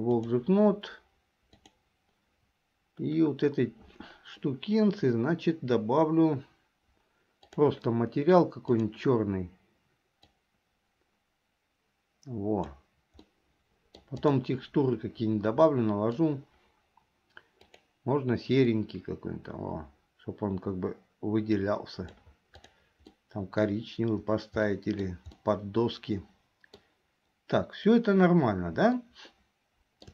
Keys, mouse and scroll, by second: 1.6 click, 8.8 click, 13.4 middle click, 14.3 click, 15.8 middle click, 23.3 middle click, 24.8 middle click, 25.6-26.9 middle drag, 29.1-30.1 shift+middle drag.